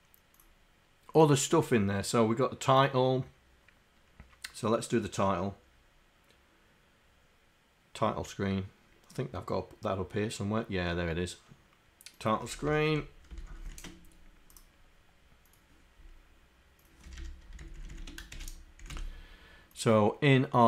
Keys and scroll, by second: 12.6 Home, 13.4 shift+Down.